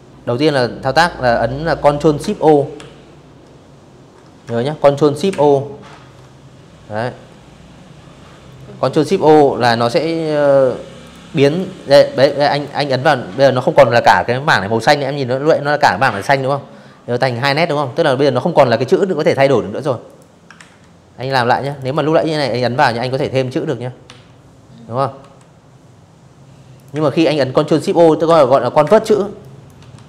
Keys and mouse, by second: 3.0 ctrl+shift+o, 8.7 click, 9.1 click, 9.8 click, 10.1 click, 17.7 click, 18.2 ctrl+z, 18.8 click, 19.2 click, 19.3 click, 19.5 click, 20.2 click, 20.7 click, 21.7 r, 22.9 v, 24.4 click, 24.6 space, 24.7 click, 26.0 ctrl+shift+o, 26.5 space, 27.1 click, 27.6 v, 30.0 space.